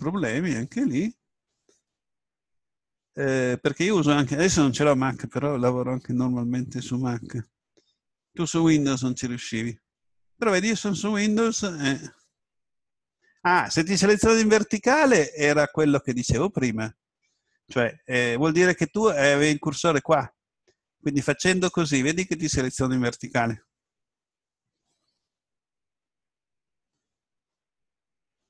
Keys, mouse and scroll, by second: 17.6 a, 21.4 right click.